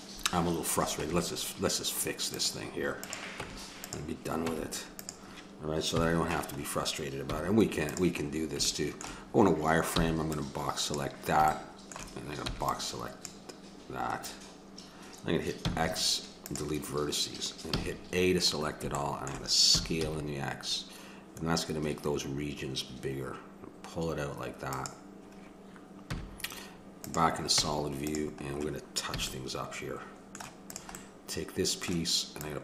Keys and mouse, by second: 2.3-5.5 drag, 3.3 Tab, 4.4 Tab, 5.9 KP_1, 7.3 z, 9.9 b, 12.4 b, 15.7 x, 17.7 a, 19.7 s, 26.1 z, 27.6 Tab, 29.1 a, 30.8-32.6 drag.